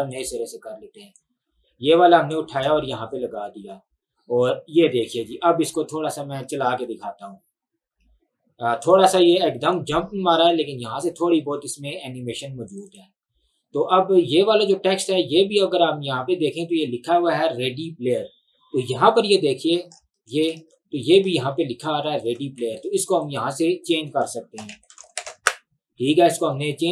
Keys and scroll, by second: 6.8 space, 11.6 space, 20.6 ctrl+1, 22.6 Escape, 24.4-25.8 typing.